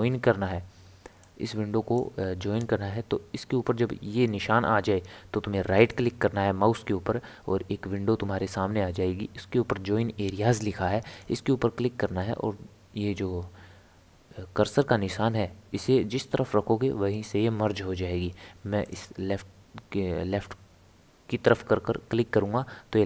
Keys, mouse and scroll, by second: 1.2-4.3 drag, 5.8-8.9 right drag.